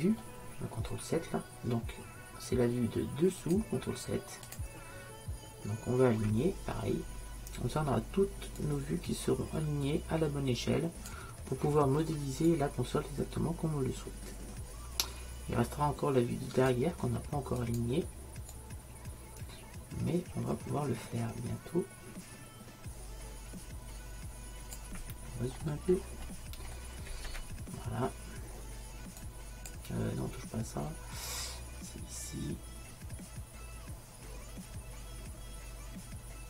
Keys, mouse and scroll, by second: 3.5-6.4 drag, 8.7-11.1 drag, 12.5-14.5 drag, 17.7-20.5 drag, 25.6 middle click, 26.4-28.4 middle drag, 29.3-33.3 drag.